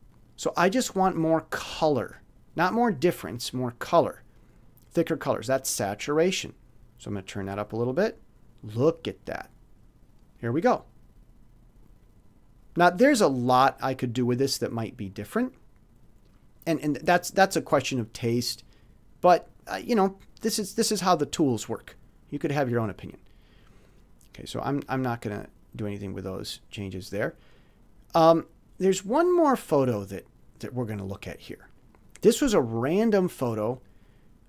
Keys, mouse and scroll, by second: 0.1 click, 2.0 click, 7.0 click, 12.0 click, 23.6 click, 25.1 click, 25.7-27.3 drag, 27.6 click, 32.6-34.0 drag.